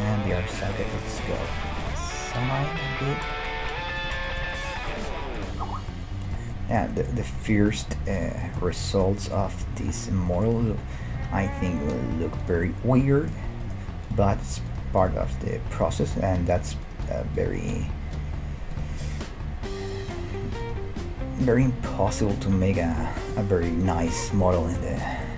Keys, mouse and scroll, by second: 0.3-1.8 right drag, 1.8-3.2 middle drag, 1.8 g, 3.2 right click, 3.4-12.2 middle drag, 5.4-6.8 right drag, 5.6 g, 7.4-11.6 right drag, 10.6 g, 12.6-14.0 middle drag, 14.0-17.5 right drag, 14.2 g, 15.1 g, 16.2 g, 17.8 g, 19.1-20.8 middle drag, 20.6-25.1 right drag, 21.0 g, 22.1 g, 23.0 g, 24.0 g, 24.6 middle click.